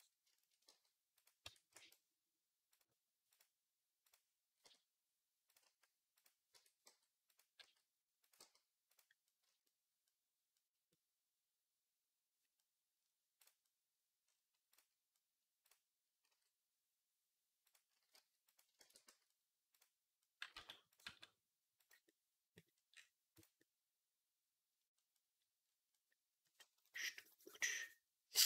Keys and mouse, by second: 0.5 g, 1.3 Tab, 1.5 a, 4.5 e, 5.3 click, 5.3-6.4 right drag, 5.5 s, 6.4 Tab, 6.7 g, 7.4 s, 8.2 g, 9.3 z, 9.5-12.2 drag, 12.2-13.7 middle drag, 12.2-18.5 right drag, 16.1 s, 17.8 s, 18.6 ctrl+a, 19.5 click, 19.5 right click, 20.2 g, 20.9 s, 21.7-24.5 right drag, 24.5-28.4 drag.